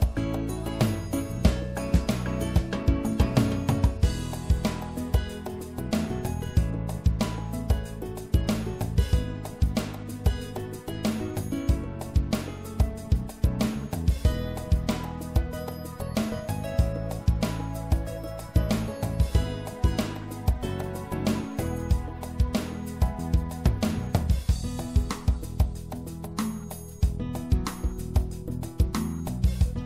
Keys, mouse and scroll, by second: 3.9 middle click, 11.1-14.1 right drag, 13.4 KP_1, 14.7 KP_3, 17.8-19.6 drag, 24.3-29.8 middle drag.